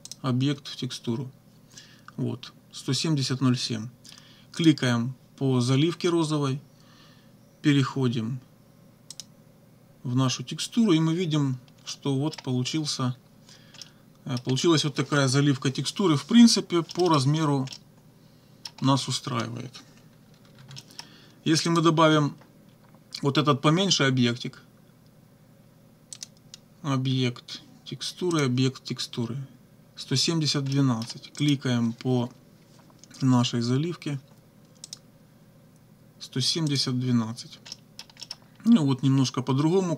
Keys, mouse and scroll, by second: 0.1 click, 4.6 click, 9.1 click, 11.9 click, 13.8 click, 16.9 click, 17.7-18.9 right drag, 18.0 click, 20.3 -, 20.8 click, 20.8 right click, 21.7 click, 26.1 click, 28.3 click, 30.7-31.2 scroll up 1, 31.4 click, 34.9 click, 36.7 click, 37.7-38.2 scroll up 1, 38.4 scroll up 1.